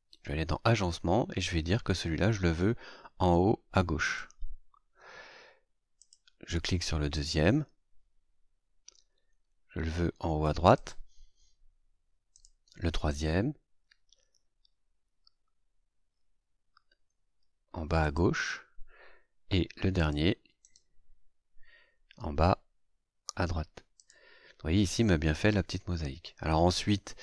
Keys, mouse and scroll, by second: 4.0 click, 6.0 click, 7.1 right click, 10.7 click, 12.3 click, 13.1 right click, 18.0 click, 19.1 scroll down 1, 19.9 click, 20.6 right click, 23.9 click, 26.4 scroll up 1, 27.0 scroll up 2.